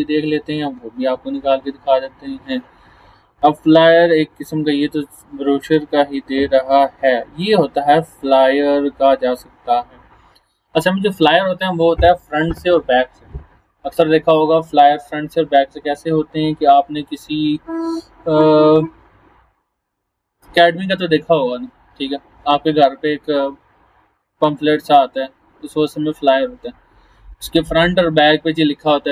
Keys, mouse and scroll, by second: 2.7 scroll down 1, 6.4 scroll down 1, 10.0 scroll down 1.